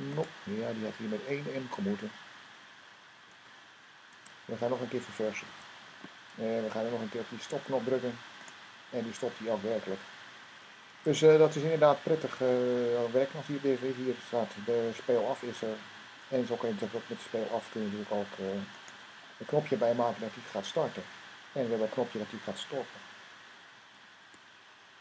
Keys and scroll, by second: 3.0 super+s, 5.3 super+r, 10.7 super+r.